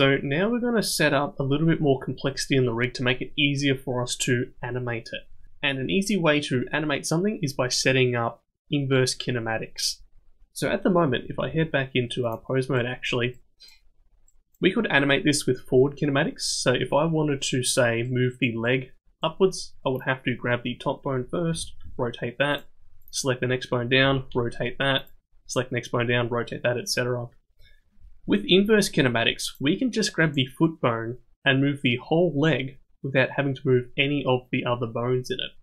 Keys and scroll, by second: 11.5 ctrl+Tab, 21.5 r, 24.0 r, 28.0 ctrl+z, 28.2 ctrl+z, 28.6 ctrl+z.